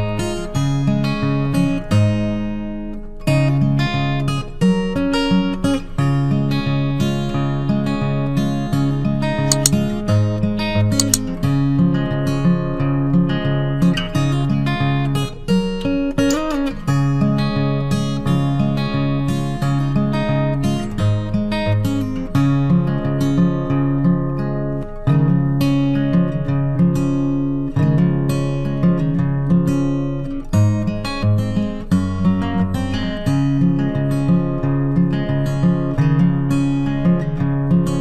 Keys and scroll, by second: 26.0 ctrl+t.